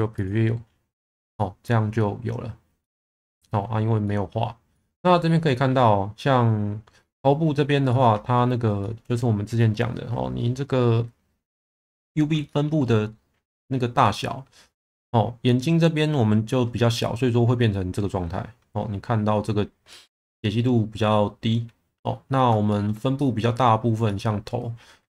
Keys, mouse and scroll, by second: 0.2 click, 1.3-1.7 middle drag, 2.8 middle drag, 4.0 middle drag, 4.7 middle click, 7.9 alt+middle click, 8.8 shift+middle drag, 12.4 shift+middle drag, 14.1 shift+middle drag, 22.7 shift+middle drag, 23.1-23.5 middle drag, 24.0 middle drag.